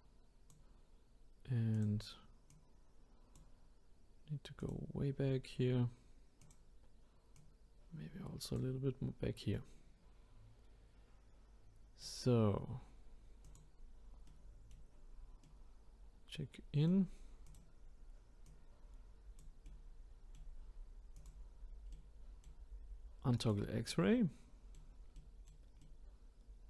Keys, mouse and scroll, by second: 1.7 click, 2.5 click, 4.6 click, 5.6-6.4 scroll down 1, 6.4 click, 7.4 click, 9.1-9.5 scroll down 1, 9.5-12.5 middle drag, 13.4 click, 14.2 middle click, 14.9-15.4 scroll down 3, 15.4-17.4 middle drag, 17.4 click, 18.4 click, 19.6-21.2 middle drag, 21.2 click, 21.5-21.9 scroll up 4, 21.9-23.4 middle drag, 23.4 click, 23.9-26.6 middle drag.